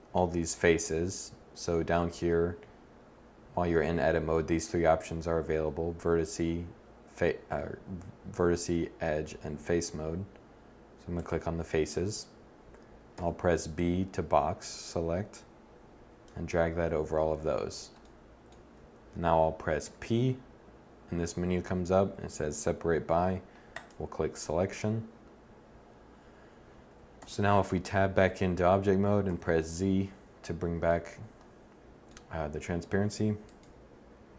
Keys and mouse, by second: 12.9 b, 19.6 p, 26.9 Tab, 29.0 z, 33.2-34.3 drag.